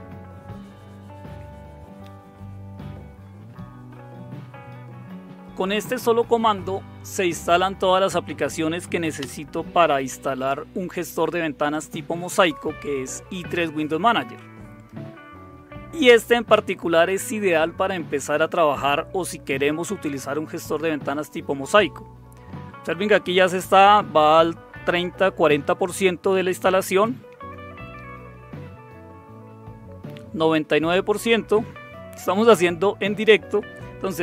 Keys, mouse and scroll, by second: 9.2 Return.